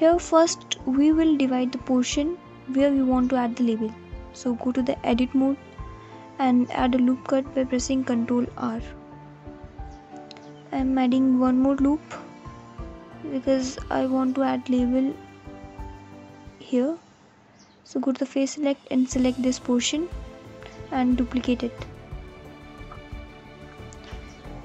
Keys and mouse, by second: 4.4 ctrl+r, 9.6 ctrl+r, 13.9 click, 15.3 click, 16.3 alt+click, 19.3 shift+d, 20.6 g.